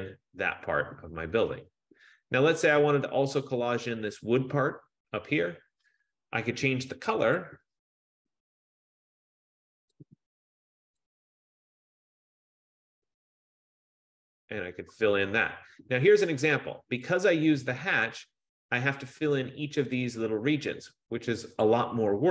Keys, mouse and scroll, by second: 1.1 F15, 7.4 click, 7.5 click, 10.4 click, 13.0 click, 14.0 click, 17.3 click, 18.2 click, 19.2 click, 20.3 click, 21.8 click.